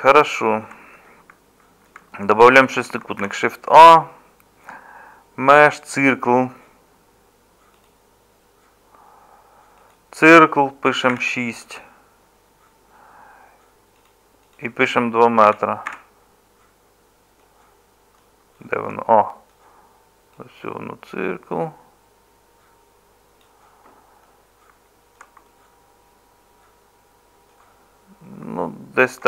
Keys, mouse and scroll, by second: 3.2 shift+a.